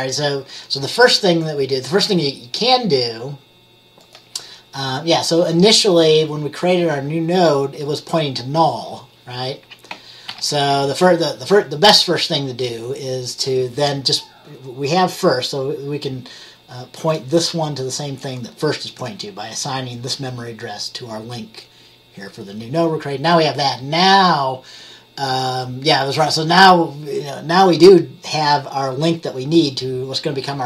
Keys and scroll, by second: 10.4 ctrl+z.